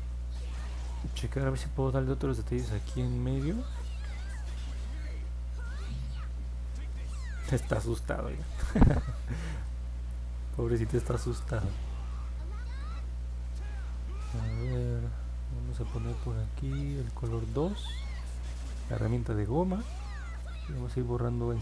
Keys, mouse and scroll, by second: 3.4-3.9 scroll down 2, 4.5-5.1 scroll down 2, 5.5-8.3 alt+drag, 8.6 middle click, 9.1 middle click, 9.6 alt+click, 11.3 alt+middle click, 12.1 alt+click, 13.0-13.6 scroll up 4, 14.2 alt+middle click, 15.3 middle click.